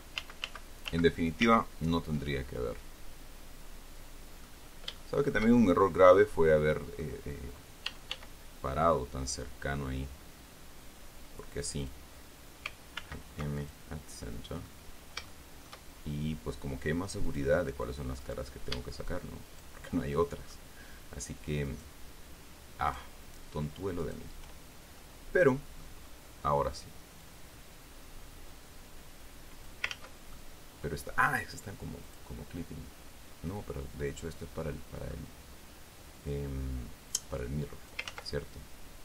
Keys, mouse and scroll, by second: 2.6-5.0 ctrl+drag, 5.2 shift+scroll down 2, 5.3-7.5 shift+drag, 8.2 e, 8.5 s, 12.1 click, 13.3 alt+m, 14.0 alt+click, 14.6 middle click, 15.2 scroll up 1, 15.6 shift+middle click, 17.6 click, 18.5 right click, 19.8 shift+right click, 20.3 shift+middle click, 22.0 shift+right click, 23.2 shift+right click, 24.4 shift+right click, 25.3-26.3 middle drag, 26.4 scroll up 2, 27.5-30.2 drag, 30.2 ctrl+z, 30.6 ctrl+scroll up 2, 30.7 ctrl+middle click, 32.4 click, 34.9 click, 37.4 click, 38.4 ctrl+z.